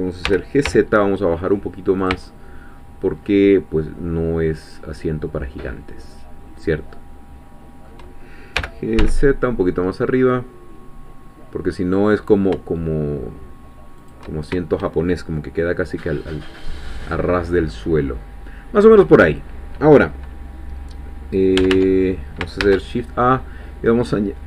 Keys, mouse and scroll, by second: 0.3 g, 0.7 z, 2.0 shift+click, 2.3-8.0 shift+middle drag, 8.6 g, 9.0 z, 14.0 shift+click, 15.4-19.5 middle drag, 19.5-21.5 scroll up 2, 21.6 Tab, 22.6 shift+a.